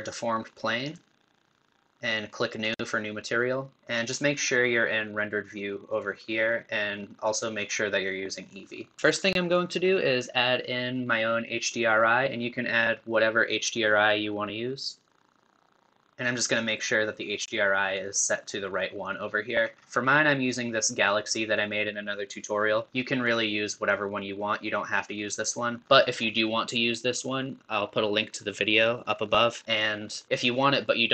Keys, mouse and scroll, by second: 23.1-31.1 middle drag.